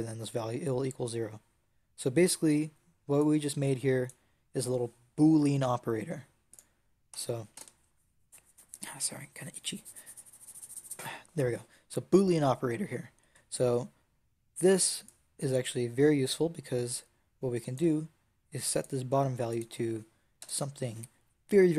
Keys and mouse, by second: 3.1-6.2 drag, 6.4-8.3 drag, 14.9-16.9 drag.